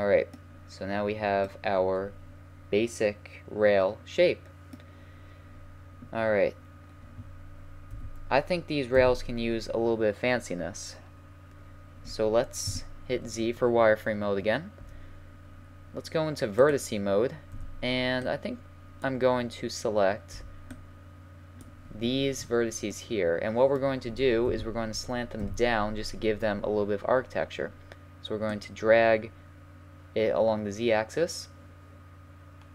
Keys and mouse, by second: 1.2 middle click, 2.7 middle click, 2.9 middle click, 3.1 middle click, 5.2-7.9 middle drag, 7.9 KP_1, 8.9 KP_3, 12.6 z, 13.5 a, 16.6-18.7 drag, 17.5 b, 20.3 b, 22.9-24.4 middle drag, 24.4 KP_1, 25.4 KP_3, 28.5-30.2 drag, 32.0-32.7 middle drag.